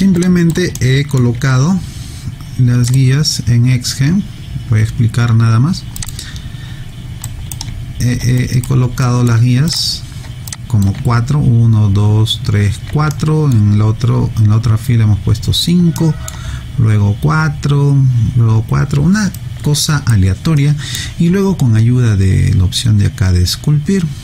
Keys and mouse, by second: 0.2 alt+click, 0.8 alt+middle click, 2.9 click, 6.0 click, 7.2 right click, 8.4 alt+right click, 9.0 alt+middle click, 9.7 click, 10.5 alt+click, 13.1 alt+middle click, 16.0 alt+middle click, 19.4 alt+right click, 20.6 alt+middle click.